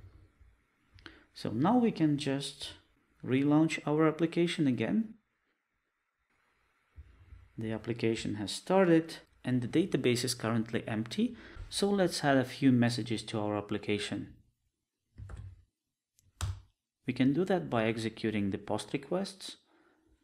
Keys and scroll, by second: 2.3 ctrl+r, 15.4 super+e.